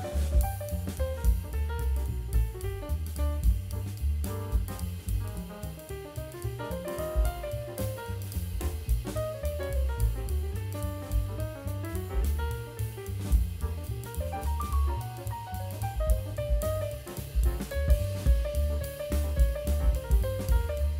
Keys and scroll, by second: 19.4 v.